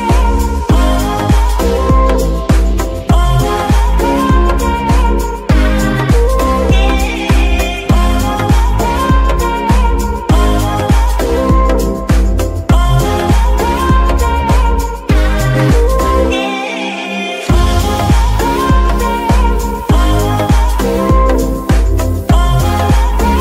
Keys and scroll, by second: 2.2-5.0 typing, 5.2 Return, 7.9 g, 7.9 y, 8.9 KP_3, 9.6 z, 11.0 Tab, 11.4 s, 12.4 Tab, 12.8 shift+s, 13.8 g, 13.9 y, 16.8 r, 18.8 KP_Subtract, 18.8 KP_9, 18.9 KP_0, 19.5 Return, 21.5 g, 21.7 y.